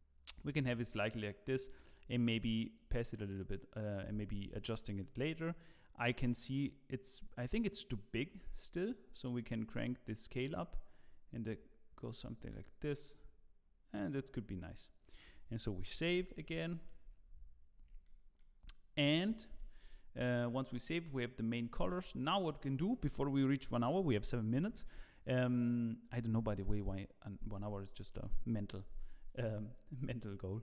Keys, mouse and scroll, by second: 2.7 click, 8.3 middle click, 9.2 click, 12.9 click, 14.5-15.3 scroll down 2, 16.1 ctrl+s, 16.6 shift+middle click, 17.6-18.0 scroll down 2, 18.0 shift+middle click, 19.5 ctrl+s.